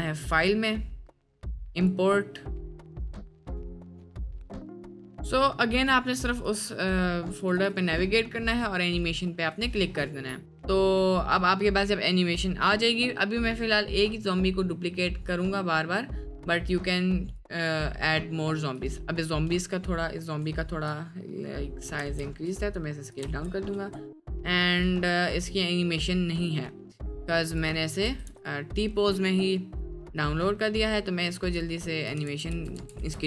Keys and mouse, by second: 17.3 click, 18.7 click, 20.5 shift+middle drag, 22.0 s, 23.2 space, 24.2 space, 24.2 middle drag, 25.3-27.9 drag, 27.9 a, 28.0 x, 30.0 click, 31.5 shift+click, 32.3 ctrl+z, 32.6 ctrl+z, 32.8 ctrl+z, 33.1 ctrl+z.